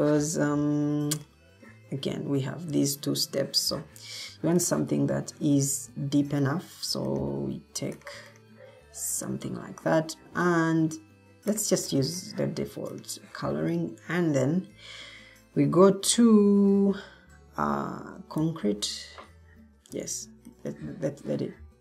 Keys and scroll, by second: 4.5 typing, 18.3 c.